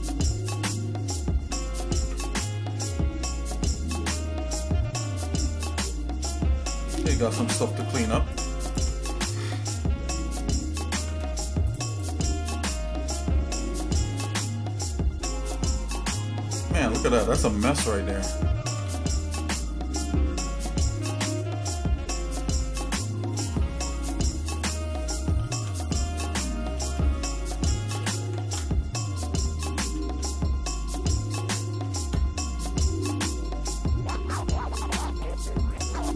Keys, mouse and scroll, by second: 0.4 click, 1.5 shift+middle click, 1.9 Tab, 2.7-5.1 shift+middle drag, 5.3 Tab, 5.9 scroll up 1, 6.6 scroll up 2, 7.7 click, 8.7 shift+click, 10.9 alt+m, 11.9 click, 12.9 shift+middle click, 13.5 middle click, 14.3 middle click, 14.8 shift+middle click, 15.6-15.9 scroll down 2, 16.3 middle click, 16.9 click, 18.6 g, 22.7 shift+middle click, 25.4 shift+z, 26.7 shift+z, 27.9 g, 35.7 click.